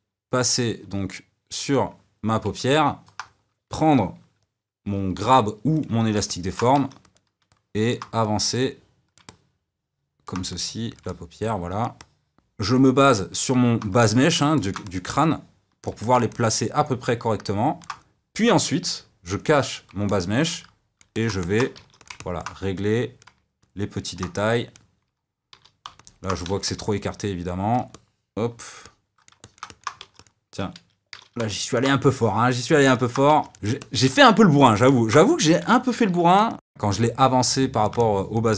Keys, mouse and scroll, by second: 1.0 d, 2.6-4.8 middle drag, 4.8 g, 5.7 click, 6.2 middle click, 6.7 f, 7.4 middle click, 8.2-9.2 drag, 9.2-10.4 middle drag, 10.4 click, 11.0-19.3 middle drag, 19.3 click, 20.0-21.7 middle drag, 21.7 f, 22.1 middle click, 22.9 click, 23.5 middle click, 24.3-25.7 drag, 25.7 d, 25.9 middle click, 26.4 f, 27.0 click, 27.8-29.9 middle drag, 29.9 f, 31.4 middle click, 32.0 click, 32.9 middle click, 33.2 f, 33.6-34.8 drag, 34.8 f, 34.9 middle click, 35.2 click, 35.4 middle click, 35.8 f, 36.0 click, 36.4 middle click, 37.3 d, 37.4 middle click, 37.5 f, 37.7 click, 38.1 middle click, 38.4 click.